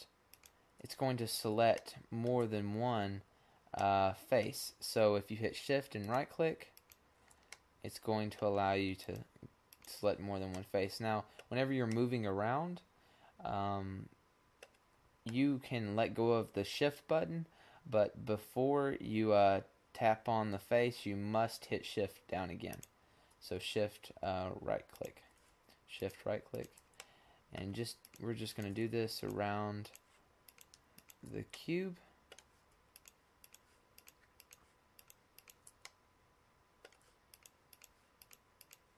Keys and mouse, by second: 0.4-1.4 right drag, 1.4-5.6 middle drag, 5.6-7.5 right drag, 7.9 middle click, 8.5 middle click, 9.0 middle click, 9.6 right click, 11.7-13.9 middle drag, 22.5-24.5 middle drag, 24.6-28.9 middle drag, 28.9-31.3 right drag, 31.3-32.3 middle drag, 32.8 middle click, 33.3-35.8 middle drag, 36.0-37.1 middle drag, 37.2 middle click, 37.7-38.9 drag.